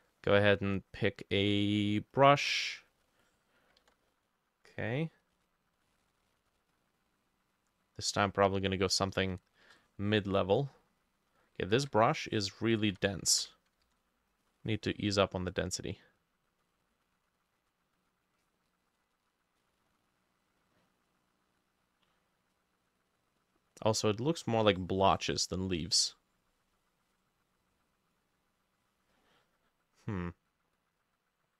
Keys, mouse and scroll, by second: 3.9 ctrl+z, 9.4 shift+click, 9.8 shift+click, 11.8 ctrl+z, 12.8 ctrl+middle click, 12.9 ctrl+z, 13.3 middle click, 13.4 ctrl+z, 13.8 middle click, 13.9 ctrl+z.